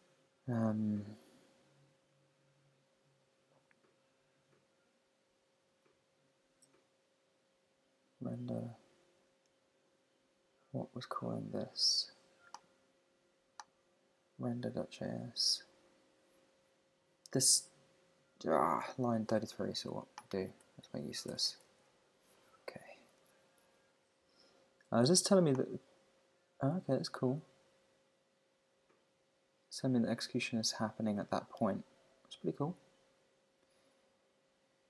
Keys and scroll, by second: 20.9 Right.